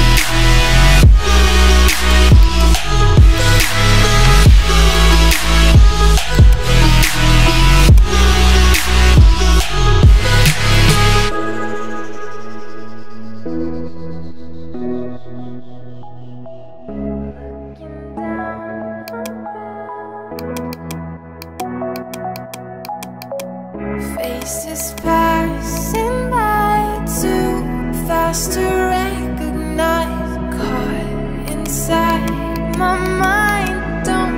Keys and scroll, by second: 8.7 [, 9.2 ].